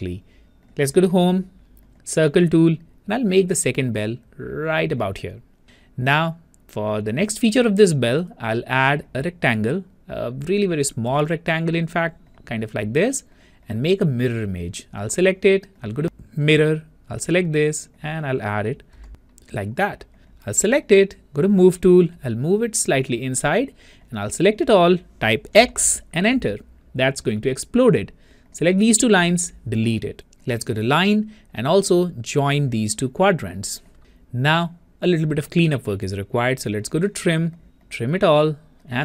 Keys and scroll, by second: 25.5 Return, 25.5 x.